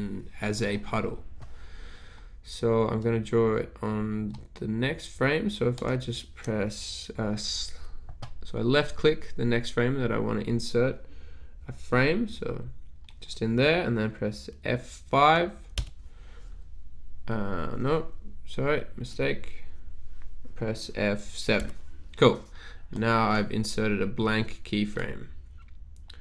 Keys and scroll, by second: 15.9 F5, 21.7 F7.